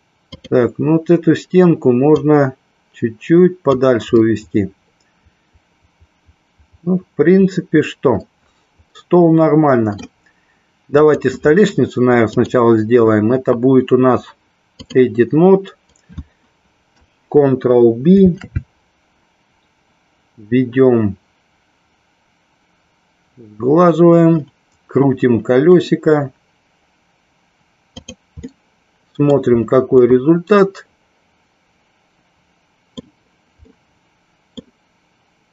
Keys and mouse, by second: 0.4 click, 2.4-4.0 drag, 4.4-10.3 middle drag, 12.5-15.1 drag, 18.4 ctrl+b, 28.1 click, 28.8 middle click, 30.3-33.1 middle drag, 33.8-34.8 middle drag.